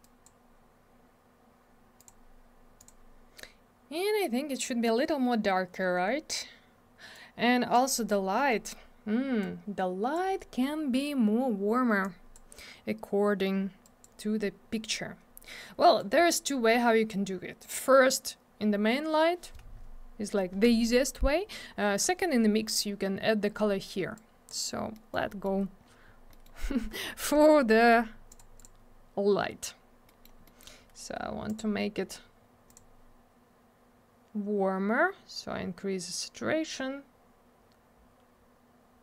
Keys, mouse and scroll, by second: 0.0 click, 2.0 click, 2.1 click, 2.8 click, 2.9 click, 7.1 click, 9.4 click, 12.0 click, 13.8 click, 14.0 click, 16.0 click, 24.2 click, 24.9 middle click, 25.1 middle click, 25.3 middle click, 25.4 double middle click, 25.6-26.1 scroll down 1, 26.4 middle click, 26.6-27.1 scroll up 1, 27.1 middle click, 27.2-27.8 scroll up 1, 27.8 middle click, 27.9 middle click, 28.3 click, 28.4 double click, 28.6 click, 28.6 click, 30.1 middle click, 30.2 middle click, 30.5 middle click, 30.6 middle click, 31.5 click, 31.6 click, 32.7 click, 32.8 click.